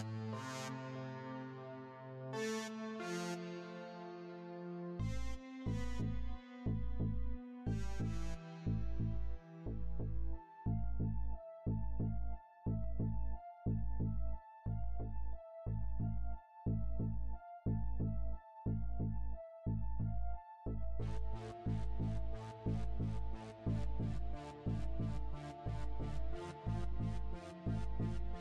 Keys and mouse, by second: 0.4 click, 1.3 click, 2.5 click, 4.5 click, 6.2 right click, 7.0 shift+d, 7.7 click, 8.8 click, 10.2 click, 11.3 s, 12.1 click, 13.5 right click, 14.4 shift+d, 15.2 click, 16.2 click, 18.4 click, 21.9 click, 23.7 click, 25.2 a, 26.1 click.